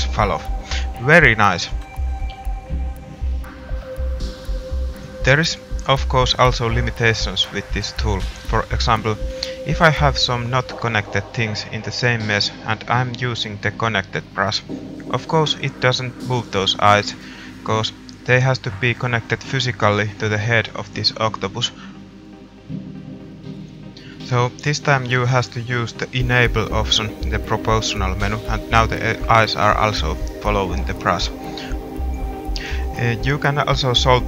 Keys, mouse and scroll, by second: 4.5 middle click, 5.0 g, 10.1 click, 20.8 r, 24.9 middle click, 26.0 g, 27.3 middle click.